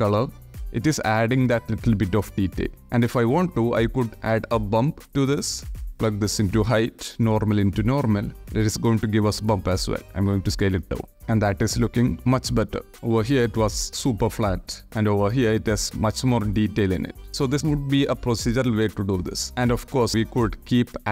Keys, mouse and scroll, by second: 0.8 click, 1.7 click, 1.9 click, 2.6 click, 5.0 shift+a, 5.6 click, 6.6 click, 8.0 click, 9.6 click, 11.2 shift+middle click, 11.5-12.0 shift+middle drag, 14.0 ctrl+z, 15.6 click, 20.3 shift+a.